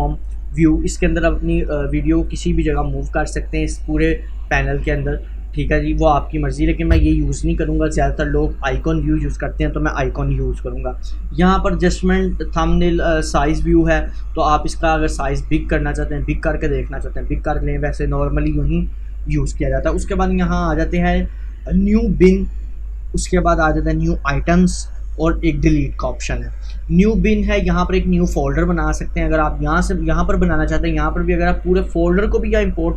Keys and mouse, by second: 1.1-8.3 drag, 8.7 click, 8.8 click, 13.9-20.0 drag, 26.2 click.